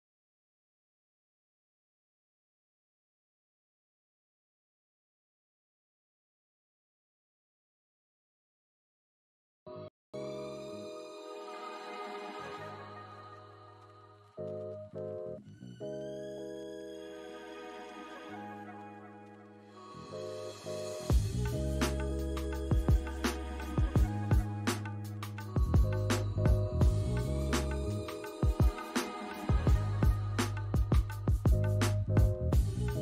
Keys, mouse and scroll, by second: 0.5 scroll up 1, 0.8 alt+click, 1.3 scroll up 1, 7.0 double click, 7.4 alt+click, 9.4 alt+middle click, 9.9 alt+click, 10.2 right click, 11.5 scroll up 1, 14.9 scroll down 1, 15.3 alt+middle click, 15.7 scroll down 1, 17.0 alt+middle click, 17.4 alt+click, 17.9 alt+middle click, 18.7 alt+click, 19.1 scroll up 2, 20.5 alt+middle click, 20.8 alt+click, 22.5 scroll down 1, 23.1 alt+middle click, 23.5 alt+click, 24.4 scroll down 1, 25.1 s, 25.4 scroll down 1, 25.8 s, 26.0 alt+middle click, 27.1 double click, 27.5 alt+click, 28.2 alt+scroll up 1, 29.2 alt+click, 30.4 scroll down 1, 30.6 alt+middle click, 31.6 alt+click, 32.9 double click.